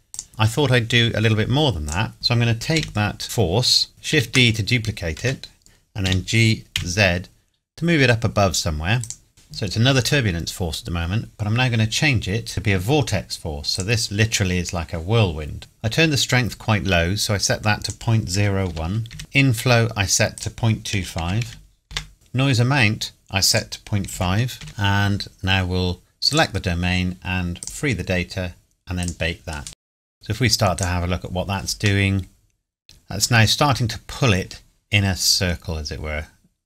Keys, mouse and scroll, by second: 0.1 click, 1.9 click, 2.1 scroll down 1, 2.7 KP_1, 4.1 shift+d, 5.2 Escape, 6.1 g, 6.8 z, 9.0 click, 9.3 middle click, 12.5 click, 17.8 click, 18.3 KP_Decimal, 18.7 KP_0, 19.1 KP_1, 19.2 KP_Enter, 20.3 click, 20.9 KP_Decimal, 21.2 KP_2, 21.5 KP_5, 21.9 KP_Enter, 23.5 click, 24.1 KP_Decimal, 24.6 KP_5, 26.3 click, 30.8 click, 32.0 middle click.